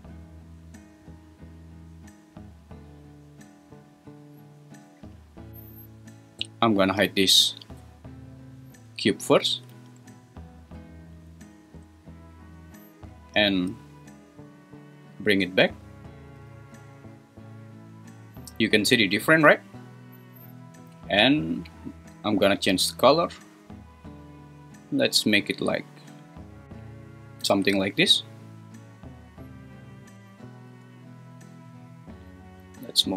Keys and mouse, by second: 9.5 h, 15.8 super+z, 32.3-33.1 drag.